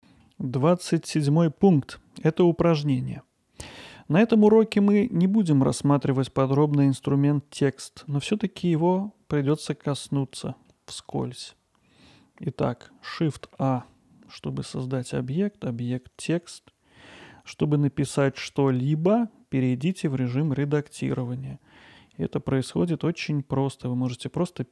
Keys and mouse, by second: 0.0 middle click, 2.4-3.6 middle drag, 7.5-8.1 middle drag, 10.7-11.2 middle drag, 13.4 shift+a, 16.5-17.3 middle drag, 20.0-20.4 middle drag, 21.2 Tab, 23.2 t.